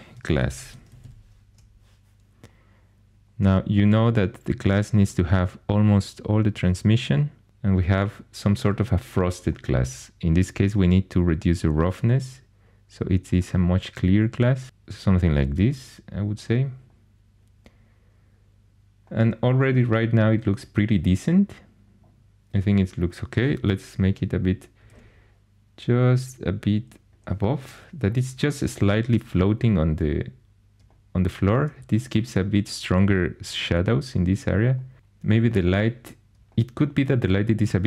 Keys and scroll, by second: 0.1-1.5 typing, 24.5-25.3 typing.